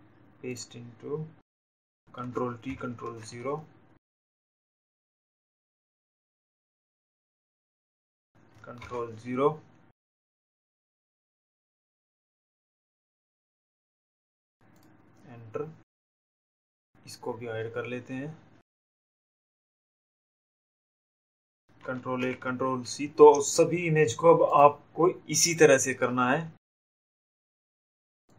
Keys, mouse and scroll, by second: 1.6 click, 3.0 ctrl+0, 6.3 click, 10.4 click, 13.1 click, 14.6 Right, 15.3 click, 18.2 click, 21.2 ctrl+a, 24.3 click, 27.6 click.